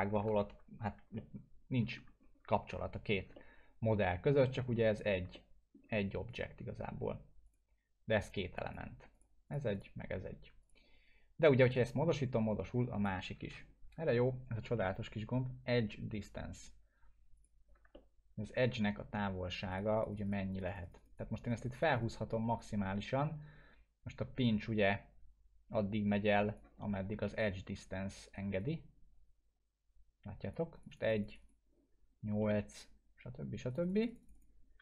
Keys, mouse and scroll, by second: 0.4 ctrl+z, 0.8 scroll down 1, 1.1-2.1 alt+middle click, 2.2 scroll up 1, 3.3-4.6 alt+middle drag, 6.3-13.2 drag, 13.4 ctrl+z, 17.3 click, 17.3 click, 17.9-18.5 alt+middle drag, 19.7 click, 26.9 scroll down 1, 28.2 right click, 28.6-31.7 drag, 32.0 scroll up 1, 32.4 middle click, 33.7 click.